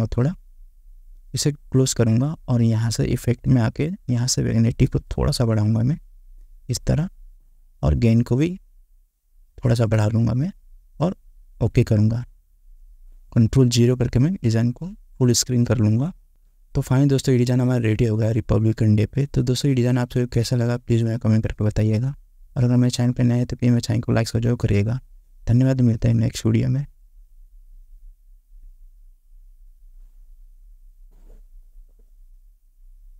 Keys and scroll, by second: 16.2 ctrl+0.